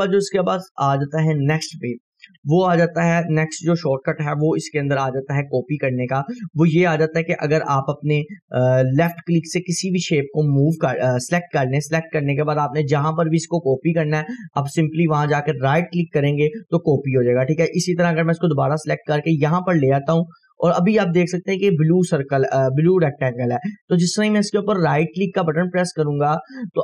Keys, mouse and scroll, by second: 1.4-2.1 drag, 5.6 Delete, 6.1 scroll up 1, 6.9-7.5 drag, 15.8-17.2 right drag, 17.2 scroll down 1, 18.2-26.8 drag, 25.2 right click.